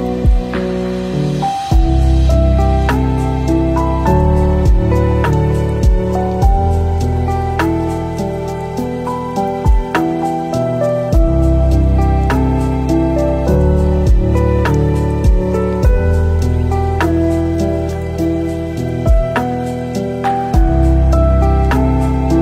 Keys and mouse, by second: 0.0 click, 0.6 click, 3.1-4.3 drag, 4.3 drag, 5.6 middle click, 6.4-8.6 drag, 9.3 click, 10.1 middle click, 10.8 ctrl+shift+click, 14.0 shift+click, 16.8-17.2 shift+middle drag, 18.0 middle click, 18.7 middle click, 19.3 middle click, 20.3 click.